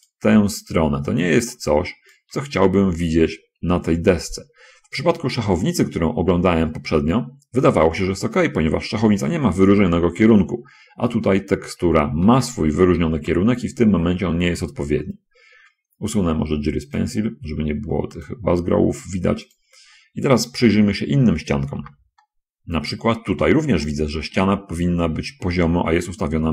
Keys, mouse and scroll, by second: 1.0 click, 1.8 click, 13.6 n, 14.6 middle click, 16.9 click, 18.3 click, 22.2 n, 22.6-23.6 middle drag, 23.8 scroll down 1, 24.2-25.6 middle drag.